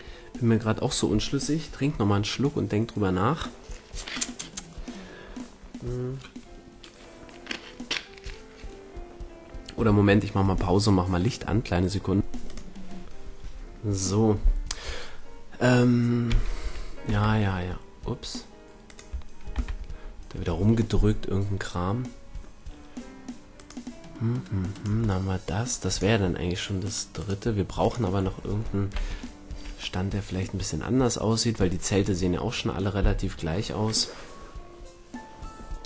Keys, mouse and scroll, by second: 18.9 click, 19.5 KP_5, 20.5 middle click, 20.9-21.7 middle drag, 23.5-26.7 right drag, 25.9-28.3 drag, 28.3 middle click, 29.0 click, 29.5 a.